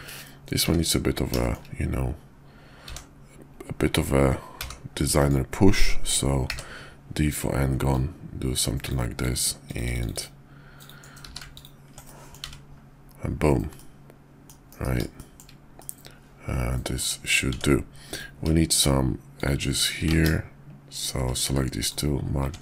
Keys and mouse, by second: 0.6 `, 1.3 shift+middle drag, 1.4 shift+drag, 2.8 f, 4.5 g, 6.4 d, 7.9 click, 10.1 click, 11.1 q, 12.1 drag, 12.4 `, 13.7 click, 14.2 middle click, 14.7 KP_5, 15.2 shift+middle click, 15.8-17.0 middle drag, 17.5 Tab, 18.0 click, 19.3 shift+click, 20.1 ctrl+z, 21.3 q, 22.4 Tab.